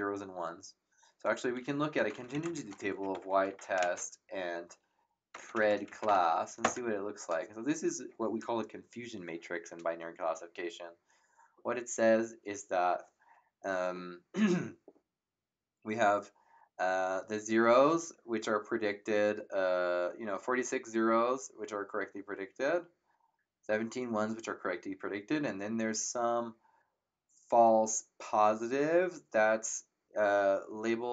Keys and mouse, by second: 1.6-6.6 typing.